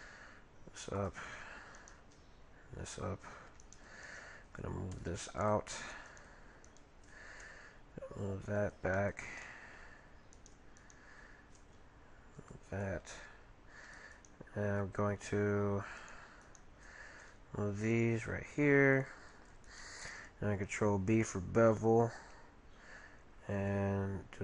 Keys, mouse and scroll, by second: 1.8-3.4 right drag, 2.0 g, 3.6 right click, 5.0 right click, 5.0-5.9 typing, 6.1-8.3 right drag, 7.4 g, 9.4-11.1 middle drag, 10.4-12.5 right drag, 11.5 g, 13.2 g, 14.1-15.9 right drag, 14.1 g, 16.0-18.1 right drag, 17.2 g, 19.6-21.3 right drag, 20.8 ctrl+b.